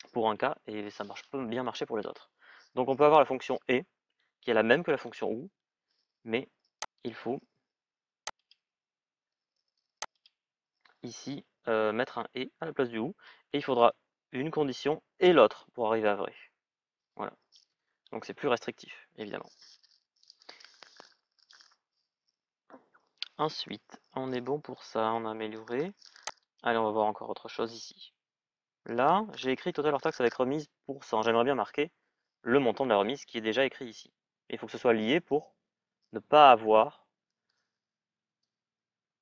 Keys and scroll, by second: 17.5 Return.